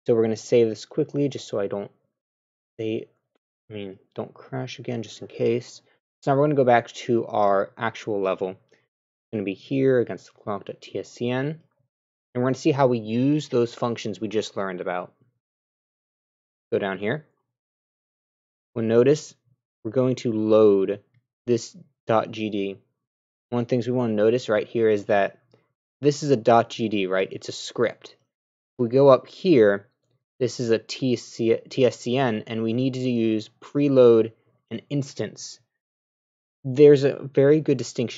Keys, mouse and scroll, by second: 0.7 click, 2.2 click, 3.4 scroll down 2, 9.5-10.1 scroll down 6, 10.1 click, 10.5 click, 16.1 middle click, 16.9 middle click.